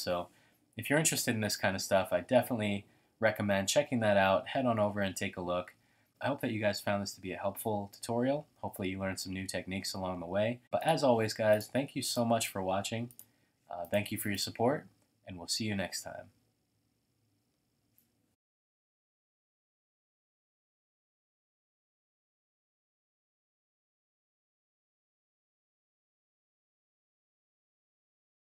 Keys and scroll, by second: 0.9 typing, 3.9-4.7 typing.